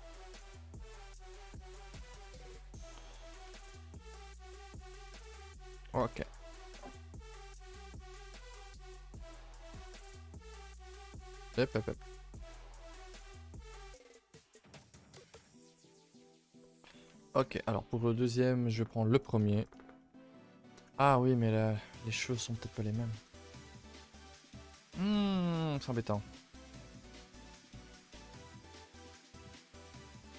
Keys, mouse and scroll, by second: 0.0 click, 0.0 g, 1.5 click, 1.6 g, 3.1 middle click, 3.7 a, 3.7 middle click, 4.1 scroll down 3, 4.3 shift+middle click, 4.8 a, 5.0 a, 5.0 scroll down 4, 5.3 ctrl+middle click, 5.5-5.9 scroll up 2, 5.9-8.0 middle drag, 8.0-8.5 scroll up 4, 8.5 click, 8.7 Tab, 8.8-9.1 middle drag, 9.1 a, 9.2 a, 9.7 click, 10.2 click, 10.5 shift+click, 11.5 click, 12.1 g, 13.5 click, 13.5 g, 14.4 click, 14.5 g, 15.5 a, 15.6 a, 15.8-16.9 middle drag, 16.9 Tab, 17.1 scroll down 2, 17.3 a, 17.4 middle click, 17.6 ctrl+s, 19.2 click, 19.7 shift+click, 20.1-20.6 shift+middle drag, 20.6 a, 20.7 a, 23.0 click, 23.6 shift+click, 27.7 middle click, 28.0 a, 28.1 a, 29.2 click, 29.5 shift+click.